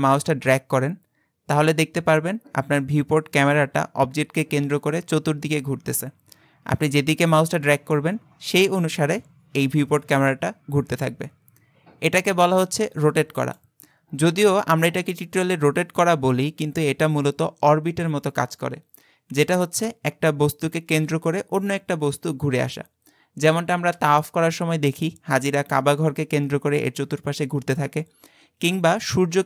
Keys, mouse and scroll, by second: 14.3-17.6 scroll up 2.